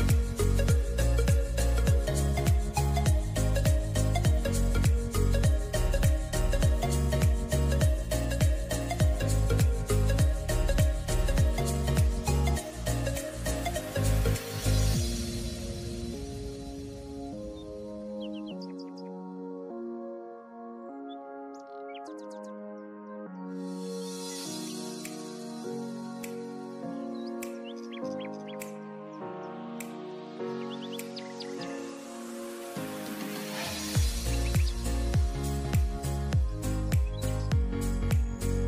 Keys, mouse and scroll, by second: 0.1 g, 3.0 s, 7.2 click, 8.3 click, 8.8 click, 9.0 click, 10.3 g, 12.7 s, 14.0 click, 14.3 click, 15.2 click, 16.2 s, 17.8 g, 19.0 click, 20.0 g, 23.2 click, 23.8 s, 26.8 e, 27.3 r, 30.8 shift+d, 33.8 click, 34.2 click, 35.8 click, 36.1 click, 36.5 click, 37.3 r.